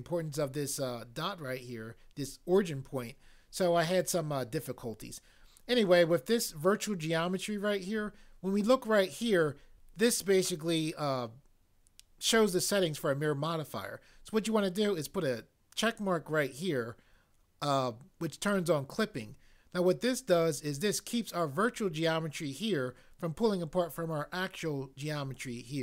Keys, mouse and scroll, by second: 16.0 click.